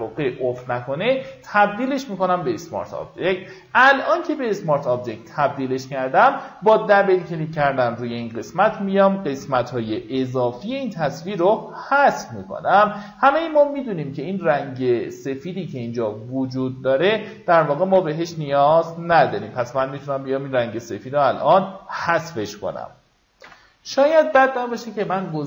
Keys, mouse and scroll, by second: 0.3 click, 6.1 alt+scroll down 1, 7.4 alt+scroll up 1, 11.2 w, 11.7 click, 19.2 ctrl+d, 19.9 alt+scroll up 1, 20.6-21.0 alt+scroll up 2, 23.1 F9.